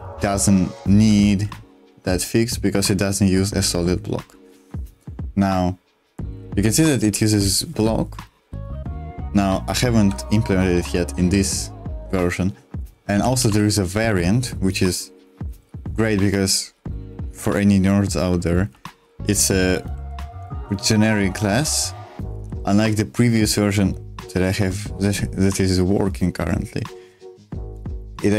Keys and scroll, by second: 0.0-1.0 typing, 4.3-11.5 typing, 13.1 b, 13.2 b, 13.4 b, 14.0 l, 15.2-16.2 typing, 17.4-21.3 typing, 22.4 h, 22.9 h.